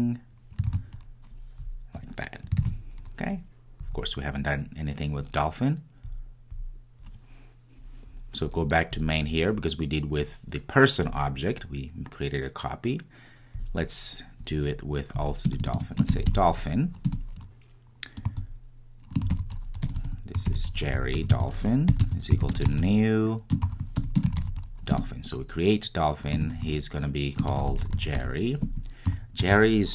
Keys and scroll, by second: 0.8 super+v, 2.6 super+s, 17.2 Return, 25.0 Return.